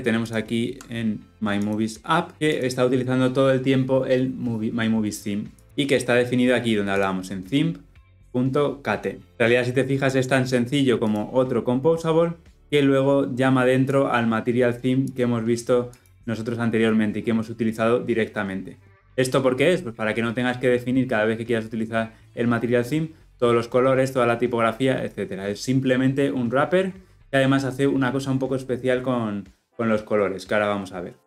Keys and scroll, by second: 0.3 ctrl+b.